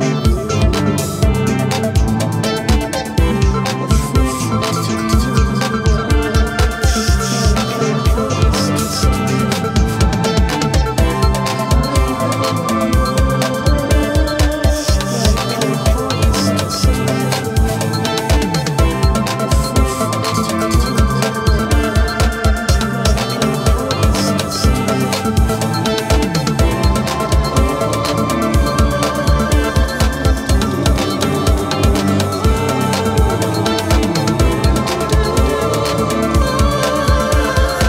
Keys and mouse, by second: 0.1 double click.